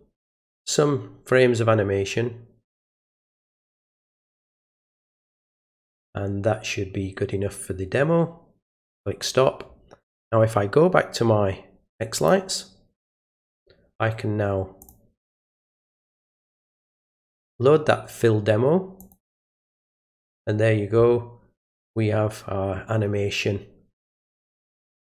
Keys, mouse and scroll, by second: 8.8 click, 12.2 click, 14.8 click, 17.3 click, 19.0 click.